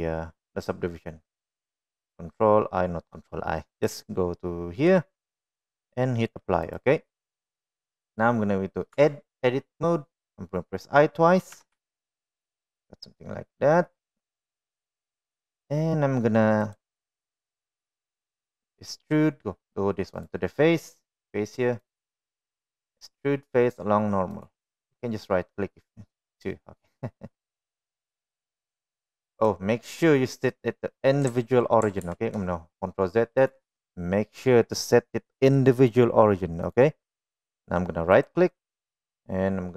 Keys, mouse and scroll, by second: 3.8-4.7 right drag, 5.4-6.8 drag, 7.7 middle click, 9.0 Tab, 11.7 i, 15.6 middle click, 20.5-21.7 drag, 22.1-29.6 drag, 32.2 ctrl+z, 33.6-36.9 drag, 38.3-39.7 right drag.